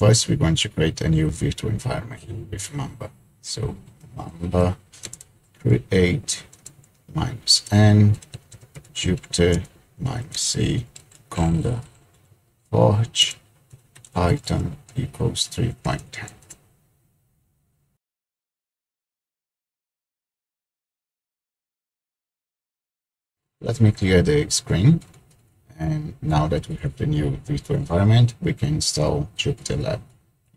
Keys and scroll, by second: 3.8-12.2 typing, 13.2-16.4 typing, 25.2 ctrl+l.